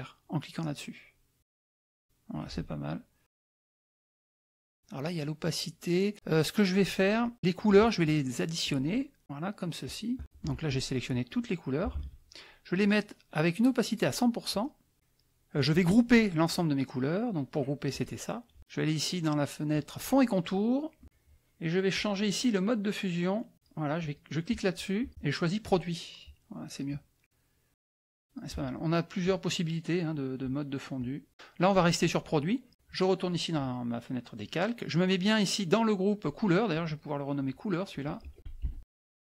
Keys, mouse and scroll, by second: 1.6 click, 2.3 click, 8.6 shift+click, 9.2 shift+click, 9.8 shift+click, 10.7-12.0 shift+drag, 11.9 ctrl+z, 13.5 right click, 14.5 click, 17.9 click, 19.7 click, 21.9 click, 23.5 click, 24.1 click, 25.7 click, 27.7 click, 29.2 click, 30.9 click, 31.3 Down, 32.7 click, 36.7 click, 37.3 click, 37.9 click, 38.1-39.2 typing.